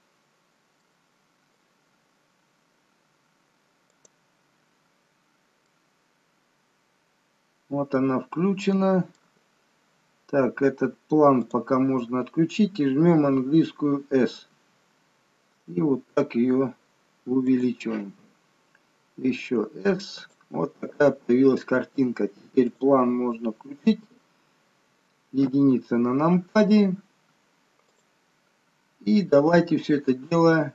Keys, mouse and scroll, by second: 1.0 middle click, 2.1-2.7 scroll up 5, 2.8-3.2 scroll down 1, 4.4 click, 5.1-5.8 scroll down 4, 6.0 middle click, 11.6 click, 19.4 s, 22.9 click, 25.6 KP_1, 28.0 click.